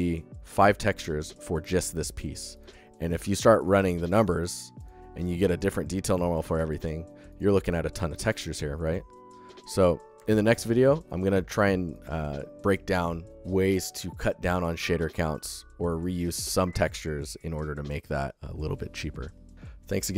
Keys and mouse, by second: 0.1 g, 10.1 alt+shift+click, 10.8 ctrl+click, 11.1 click, 11.3 alt+shift+click.